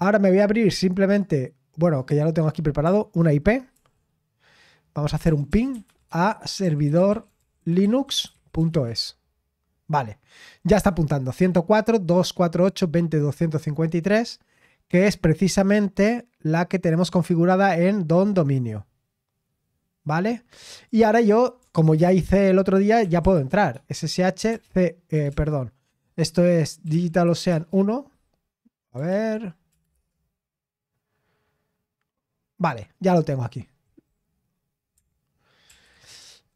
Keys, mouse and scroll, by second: 0.5 click, 1.2 click, 1.9-5.2 drag, 5.0-9.2 typing, 14.1-17.3 drag, 18.6-20.0 scroll down 1, 20.0-20.7 scroll down 1, 20.7-23.0 drag, 22.7-25.3 typing, 26.6-27.7 typing, 29.1 ctrl+p, 29.7 BackSpace, 29.9 Return.